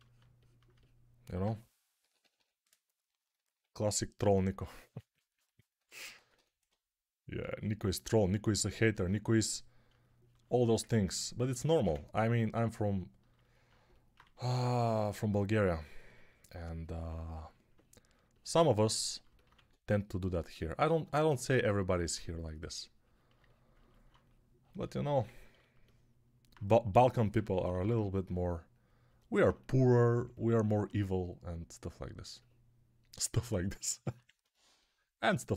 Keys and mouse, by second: 1.9 p, 2.1 [, 2.2 [, 5.7 1, 6.0 1, 6.2 1, 7.3 ctrl+z, 14.1 2, 19.4 1, 26.8-27.8 typing, 33.9 alt+q.